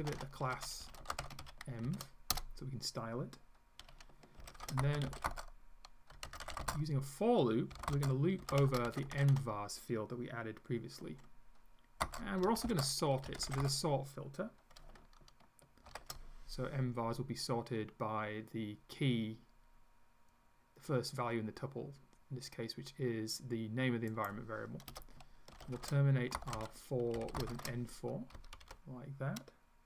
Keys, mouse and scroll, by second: 0.0-2.4 typing, 4.2-9.8 typing, 12.0-14.1 typing, 15.9 shift+5, 24.1 click, 24.9 Return, 25.3-28.1 typing, 28.4 Up, 28.7 End.